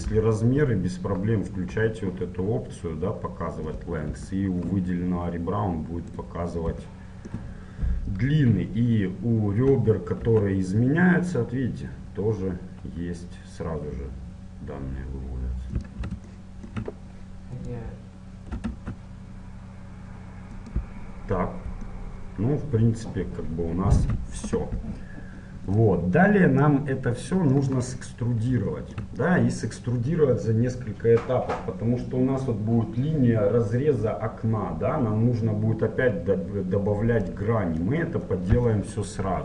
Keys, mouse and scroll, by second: 0.1 n, 3.8-5.7 drag, 4.4-6.3 middle drag, 6.3-8.1 right drag, 8.1 middle click, 9.7 e, 16.4 middle click, 17.6-19.5 right drag, 18.6 e, 21.0-23.9 middle drag, 25.7-27.3 drag, 27.3-31.3 middle drag, 37.3-39.1 drag, 39.1-39.4 middle drag.